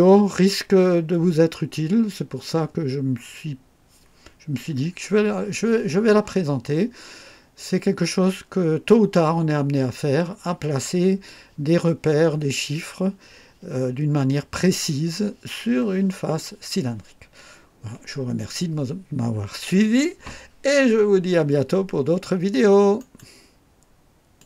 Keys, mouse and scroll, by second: 6.7-7.1 scroll up 2, 17.5 scroll down 1, 22.9 right click, 24.3 click.